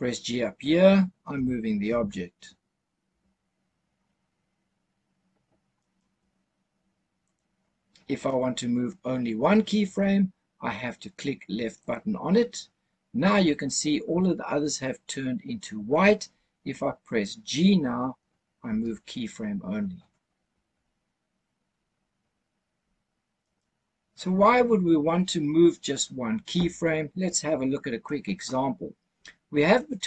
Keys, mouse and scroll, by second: 1.2 g, 1.7 x, 5.7-7.1 right drag, 7.1 click, 11.7 click, 18.5 g, 23.3 right click.